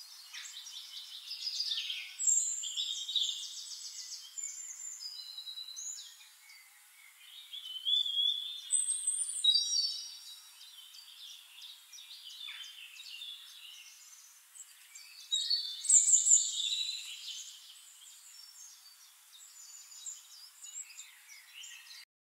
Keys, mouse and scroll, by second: 0.4 click, 2.4 Delete, 3.3 click, 4.6 click, 5.0 middle click, 6.0 shift+click, 7.8 click, 8.6 KP_5, 8.8 Return, 9.7 click, 11.1 shift+-, 12.4 click, 12.8 click, 13.8 middle click, 14.1 click.